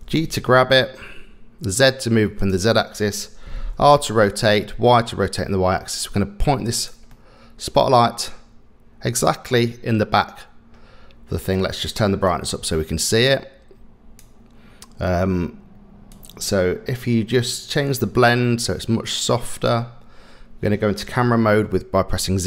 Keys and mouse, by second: 0.0 g, 3.7 r, 7.1 middle click, 9.3-10.0 middle drag, 12.4-14.2 drag, 16.2 click, 18.1-19.8 drag.